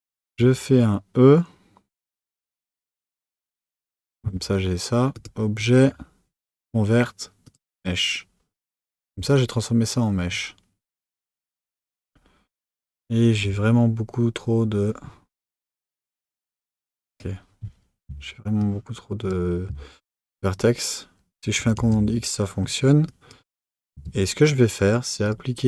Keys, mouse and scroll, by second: 0.2 e, 3.5 Tab, 5.1-8.2 drag, 9.0 Tab, 11.0 click, 15.7 click, 17.1 click, 18.6 shift+click, 21.7 x, 23.0 click, 23.9 Tab, 25.2 click.